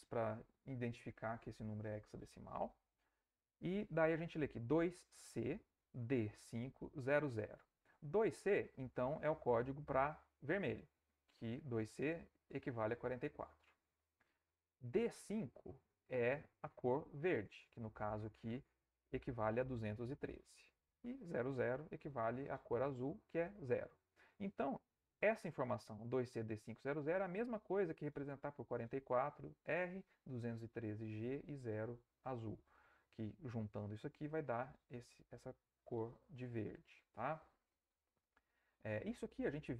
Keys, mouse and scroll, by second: 39.2 alt+Tab.